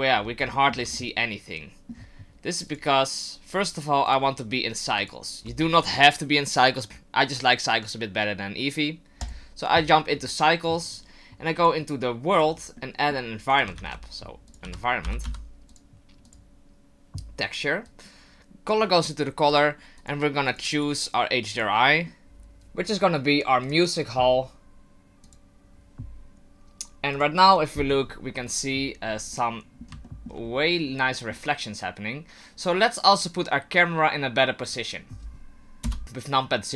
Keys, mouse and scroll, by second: 0.1-0.5 scroll down 2, 0.5 shift+middle click, 0.9 middle click, 2.7 click, 4.1 click, 5.0 click, 6.5 click, 11.6 click, 12.8 middle click, 13.5 click, 13.7 shift+a, 17.8 click, 25.4 click, 27.2 click, 29.3 middle click, 29.5 middle click, 30.0 shift+middle click, 30.4-30.9 scroll up 4, 30.9 middle click, 34.7 click, 35.8 KP_0, 36.0 click.